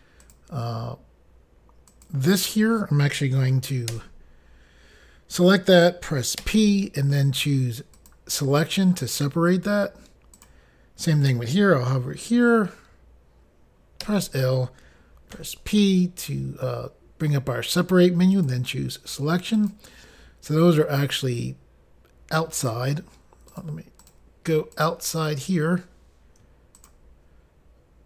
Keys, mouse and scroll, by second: 0.3 click, 0.4 click, 1.9 click, 2.1 click, 8.0 click, 10.4 click, 18.4 click, 19.6 click, 23.6 click, 23.7 click, 24.1 click, 24.2 double click, 24.8 double click, 24.9 double click, 26.8 shift+click, 27.0 shift+click.